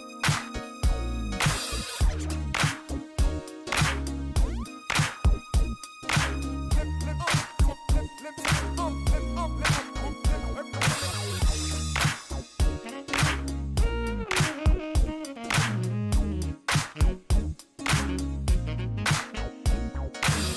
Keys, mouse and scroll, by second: 1.5 click, 2.5 click, 3.6 click, 5.1 click, 6.6 click, 6.9 right click, 7.2 scroll up 1, 8.1 right click, 8.4 click, 9.1 click, 10.1 click, 11.1 click, 12.4 click, 16.4 click, 18.4 click, 19.8-20.5 typing.